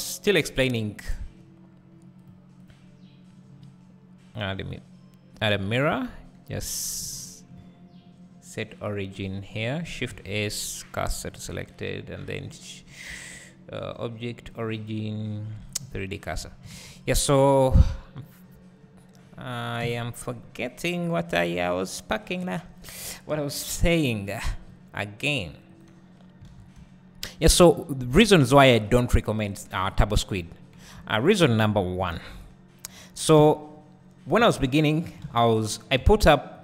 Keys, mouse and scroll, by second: 5.5-7.2 drag, 5.9 Tab, 6.5 1, 16.7 alt+a, 16.7-22.5 drag, 17.1-17.4 scroll up 1, 17.4 `, 18.9-19.8 scroll up 1, 19.8 KP_1, 20.6-22.5 scroll down 1, 23.3 g, 24.2 right click, 24.6 scroll up 1, 24.7 g, 25.8 right click, 26.5 alt+a, 26.8 `, 27.6-29.0 scroll up 1, 29.8 KP_1, 30.6-31.7 scroll down 2, 31.7-33.0 scroll up 2, 33.0 click, 33.4 Tab, 35.0 z, 35.1 click, 35.2 alt+a.